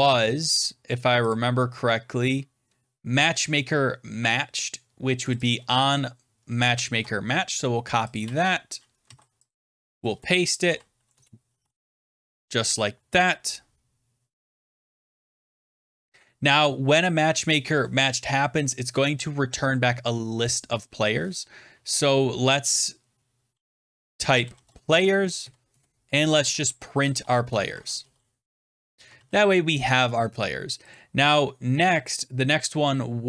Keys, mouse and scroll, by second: 1.2 click, 2.5-2.9 scroll down 5, 5.2 click, 5.4 click, 6.8 ctrl+c, 7.0 scroll down 3, 8.0 click, 8.1 ctrl+v, 9.0 ctrl+z, 9.4 click, 9.6 ctrl+v, 10.5-12.1 typing, 11.1 middle click, 13.2 click, 13.4-13.9 scroll, 13.4 :, 13.4 (, 13.4 ), 14.3 scroll down 9, 15.2-15.8 scroll down 2, 16.9 scroll, 17.0 click, 20.8 click, 23.9-28.4 typing, 25.3 Right, 25.6 Return, 29.0 ctrl+s, 30.9 click.